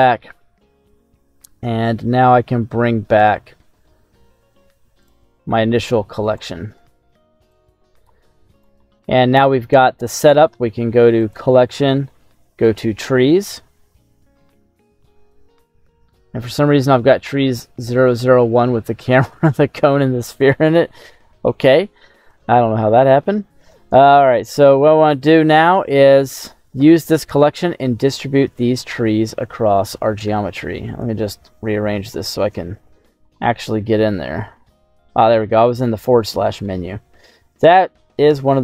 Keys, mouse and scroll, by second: 5.1 click, 6.3 right click, 7.5 click, 8.5 right click, 8.8 scroll down 2, 9.1 middle click, 10.3 scroll up 2, 10.5 middle click, 11.1-20.6 drag, 22.9 shift+middle click, 23.8-24.7 scroll up 6, 24.7 scroll down 1, 24.8 middle click, 28.7-30.3 scroll down 8, 30.3 KP_7, 31.0 shift+middle click, 31.7-32.5 scroll up 5, 32.5 shift+middle click, 33.0 middle click, 33.0 scroll up 1, 33.4 middle click, 34.4 /, 35.2 middle click, 35.2-35.8 scroll up 3, 36.0 scroll down 1, 36.2 middle click, 36.9-37.3 scroll up 5, 37.6 scroll down 2, 38.1 shift+middle click.